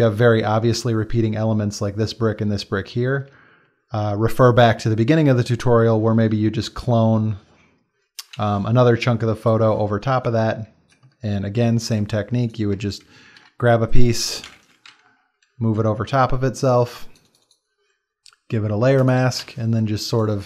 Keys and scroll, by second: 13.2 ctrl+c, 13.4 ctrl+v, 14.5 ctrl+shift+], 14.9 ctrl+t, 19.5 b.